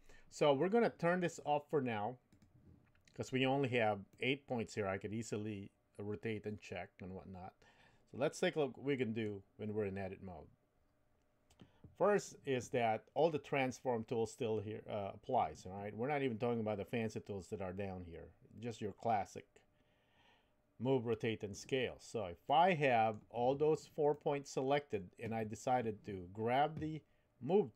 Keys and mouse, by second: 2.3 click, 4.1-9.5 middle drag, 22.5 middle click, 24.1 middle click.